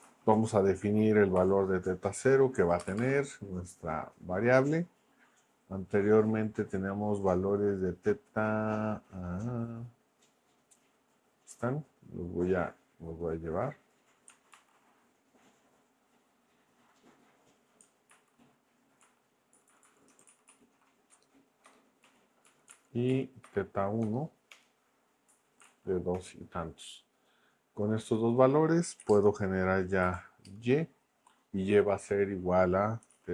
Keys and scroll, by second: 0.0-1.4 typing, 2.9 =, 3.0 space, 14.5 super+c, 18.1 super+v, 19.0 Up, 19.5 Left, 20.2 alt+shift+Right, 21.1 BackSpace, 21.6 BackSpace, 22.0 Right, 22.4 Down, 22.7 super+Left, 23.1 Right, 23.4 BackSpace, 24.0 BackSpace, 24.5 Return, 25.3 Right, 26.1 Return, 29.0 y, 29.1 space, 30.0 =, 30.4 space, 32.8-33.3 typing.